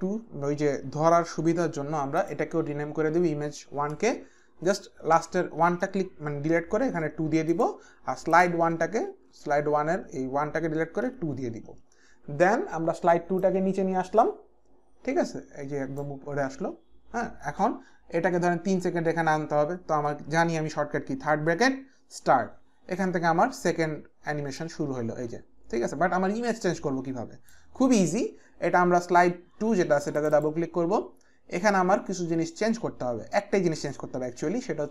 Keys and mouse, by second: 2.2 click, 4.0 Return, 4.0 click, 4.6 Right, 5.5 Right, 5.5 Return, 5.5 click, 5.5 BackSpace, 6.8 KP_2, 7.5 Right, 7.5 Return, 7.5 click, 7.5 KP_2, 7.5 BackSpace, 8.3 click, 8.7 Return, 9.3 Right, 10.3 BackSpace, 11.1 KP_2, 11.7 Return, 13.4 click, 15.2 Return, 15.2 click, 15.9 click, 24.6 click, 30.2 click.